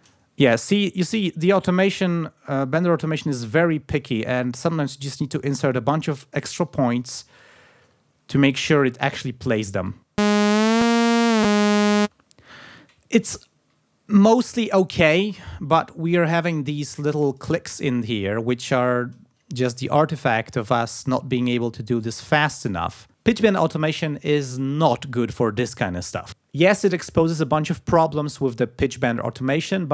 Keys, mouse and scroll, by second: 2.5 ctrl+click, 3.3 click, 3.7 click, 4.2-4.8 ctrl+scroll down 4, 4.9-6.1 ctrl+scroll up 6, 6.7 click, 7.0 click, 7.3 click, 7.9 ctrl+scroll down 2, 9.8 space, 12.0 space, 15.8-16.3 ctrl+scroll up 2, 16.5 ctrl+scroll down 2, 17.0 ctrl+scroll up 2, 19.4-20.7 shift+drag, 21.5-23.1 shift+drag.